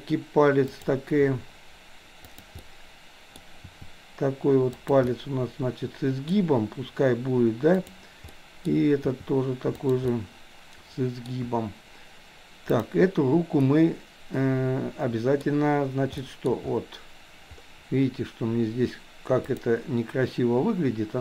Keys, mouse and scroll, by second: 0.7 click, 1.2 r, 2.7 middle click, 3.7 r, 5.1-6.4 middle drag, 8.4 middle click, 9.1 r, 10.2-11.3 middle drag, 12.7 click, 13.7-15.4 middle drag, 16.2 middle click, 19.6 click.